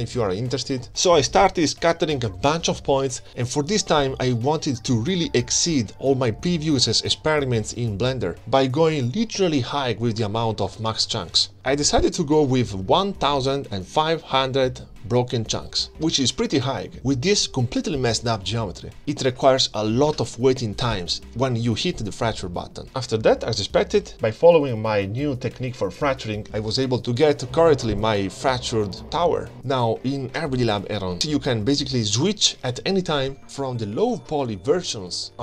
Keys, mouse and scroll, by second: 0.0 click, 0.1-1.8 drag, 1.2-1.5 scroll down 1, 1.5 0, 1.6 0, 3.1 click, 3.7-5.3 drag, 5.3 0, 5.5 scroll down 3, 10.0-12.5 drag, 15.0-18.8 drag, 19.1-20.7 middle drag, 22.9-29.9 middle drag, 29.9-31.1 drag, 31.7-33.9 drag, 33.9-34.3 scroll down 4.